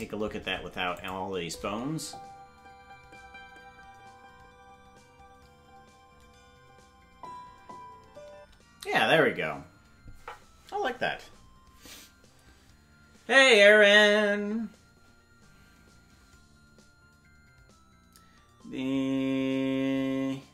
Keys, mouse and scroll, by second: 0.9 click, 1.4 space, 8.3 space.